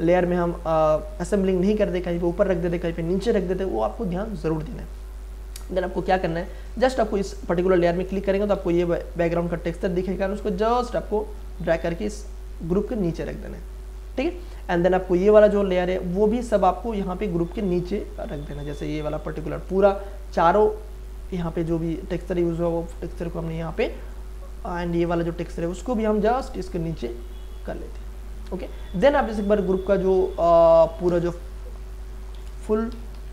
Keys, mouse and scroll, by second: 6.6 click, 6.7 click, 8.5 ctrl+z, 9.8-10.8 scroll down 1, 10.8 click, 10.9-13.2 drag, 13.2 scroll up 1, 14.2-15.7 scroll down 1, 15.7 click, 17.3-18.5 scroll up 1, 19.3 shift+click, 20.3-25.0 drag, 26.0-27.8 drag, 27.8-29.2 scroll up 1, 30.4 click, 32.3-33.3 typing.